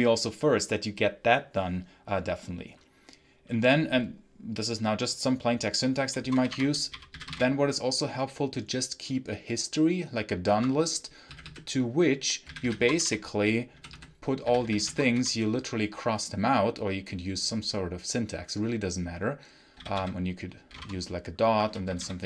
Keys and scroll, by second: 5.9-7.7 typing, 10.4 Escape, 11.2-15.5 typing, 19.6-22.2 typing.